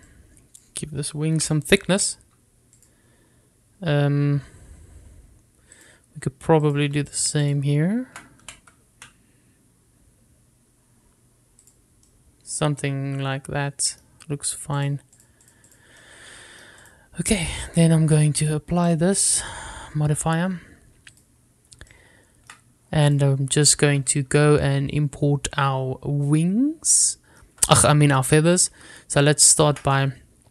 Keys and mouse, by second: 0.0 click, 0.6 click, 1.3 click, 2.5 g, 3.0 z, 3.9 click, 6.9 click, 7.8 click, 8.5 shift+click, 9.5 g, 10.0 z, 12.7 click, 13.2-15.1 middle drag, 16.3 click, 16.9 click, 17.2 middle click, 18.0 click, 19.6-20.1 drag, 22.2 click, 23.0 shift+middle click, 28.3 shift+middle click, 28.9 click.